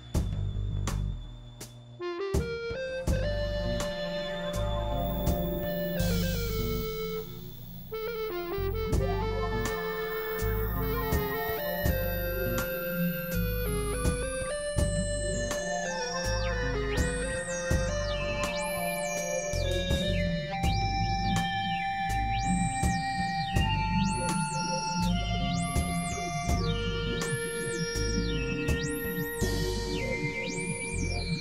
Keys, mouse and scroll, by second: 0.2 click, 1.8-3.2 drag, 6.2-7.2 drag, 7.4 click, 8.5 click, 9.3 click, 10.3 click, 10.9 click, 11.5 click, 12.3-13.2 drag, 13.7 x, 13.9-14.7 drag, 14.8-15.5 drag, 15.4 x, 16.0 click, 17.0 click, 18.0 click, 19.0 ctrl+z, 19.6 middle click, 20.4 KP_1, 20.6 KP_3, 21.7 x, 21.8 click, 24.8-25.9 drag, 25.3 x, 26.5 click, 27.1 click, 27.7 click, 28.3 click, 30.1 click, 30.5 click.